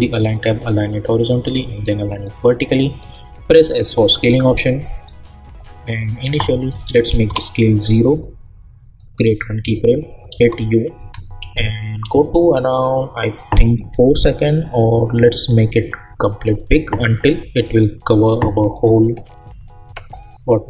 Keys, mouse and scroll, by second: 3.0 s, 3.8-6.2 drag, 7.2 Return, 8.9 click, 10.3 u, 11.0 u, 11.4 =, 12.0 =, 13.8-20.6 drag.